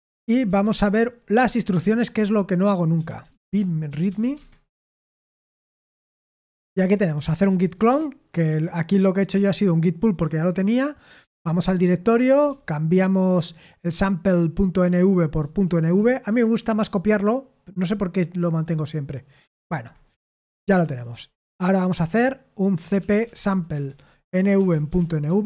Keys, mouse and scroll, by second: 0.0-0.7 typing, 3.2-4.1 typing, 4.4 Tab, 4.8 Return, 23.7 Tab, 23.7 typing.